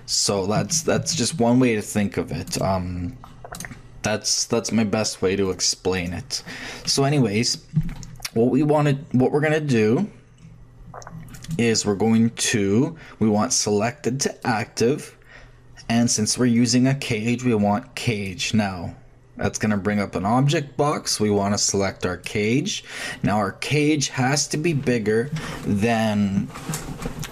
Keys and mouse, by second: 0.9 ctrl+z, 5.1-7.7 drag, 10.5-14.4 middle drag, 14.4-16.2 drag, 18.1-19.9 drag, 20.9-22.7 drag.